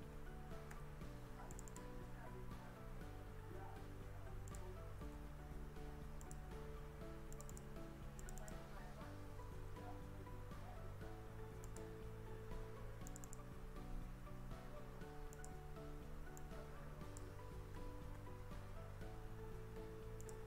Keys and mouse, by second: 0.8 f, 1.7 click, 2.7 ctrl+b, 4.5 click, 4.9 g, 5.2 z, 6.3 click, 7.4 click, 7.6 click, 8.2 click, 8.4 click, 9.4 ctrl+b, 11.7 click, 13.1 click, 13.9 ctrl+b, 15.4 click, 16.5 click, 17.8 d, 18.2 s, 20.2 click.